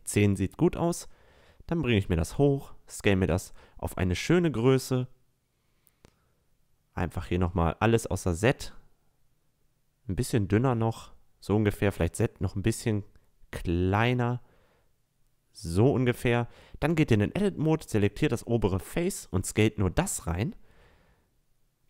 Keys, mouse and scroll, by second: 0.3-1.1 middle drag, 1.1-1.7 drag, 2.0 s, 6.2 s, 11.2 s, 16.1 Tab, 17.1-18.9 right drag, 17.8 s, 21.5 e.